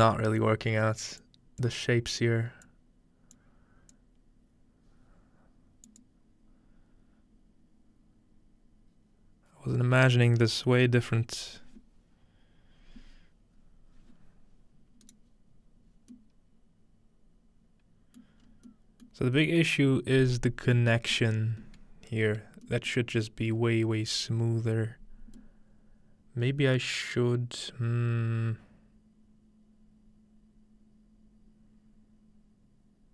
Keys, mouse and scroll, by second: 0.5-1.7 scroll down 1, 1.7-5.7 drag, 5.9-7.7 drag, 16.2-19.7 middle drag, 19.7-21.7 scroll up 2, 21.7-23.7 scroll up 1, 23.7-33.1 shift+middle drag.